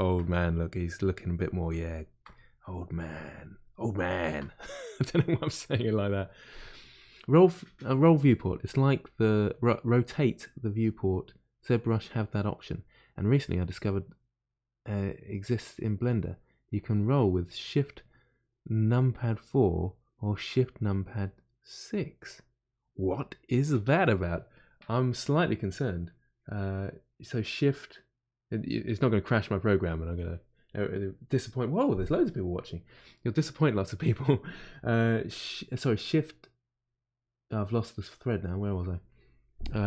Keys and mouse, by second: 2.5-4.1 drag, 4.1-39.8 ctrl+middle drag.